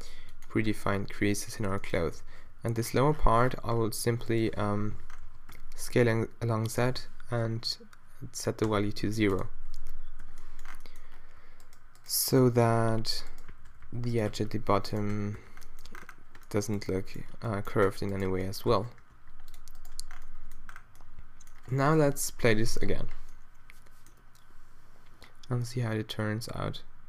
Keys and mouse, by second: 0.2 z, 2.2 s, 4.7 o, 5.3 s, 9.7 z, 9.9 z, 10.2 z, 11.6-16.5 drag, 12.4-15.9 typing, 15.9 Tab, 18.7 Tab, 19.2 ctrl+r, 20.1 Tab, 21.7 a, 22.4 shift+Left, 22.6 alt+a.